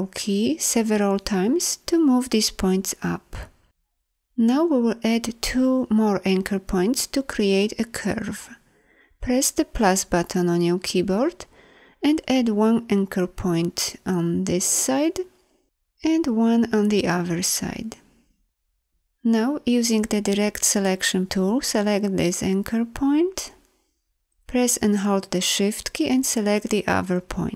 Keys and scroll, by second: 9.7 =, 19.2 a.